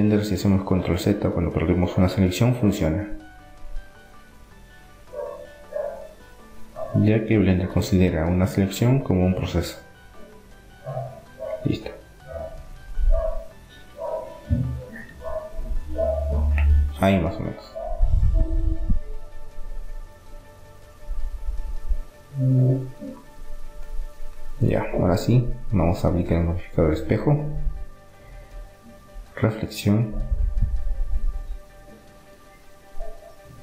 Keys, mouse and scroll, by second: 2.9-4.4 middle drag, 4.4-6.1 drag, 10.4-14.9 middle drag, 16.1-17.9 drag, 17.9-20.1 middle drag, 19.8 r, 23.7 Tab, 25.3-27.3 middle drag, 27.5-29.4 drag, 32.1-33.6 drag.